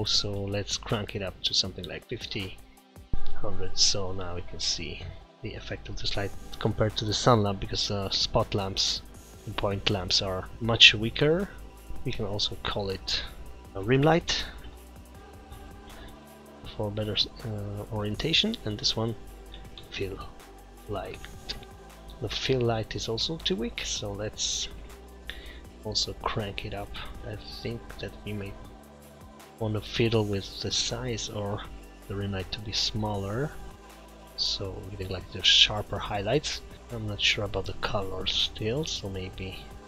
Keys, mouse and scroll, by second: 11.9 click, 11.9 scroll down 4, 12.0 click, 12.3 click, 17.2 click, 17.9 click, 18.1 click, 20.2 l, 23.0 click, 27.6 click, 28.5 click, 31.2 click, 38.9 click.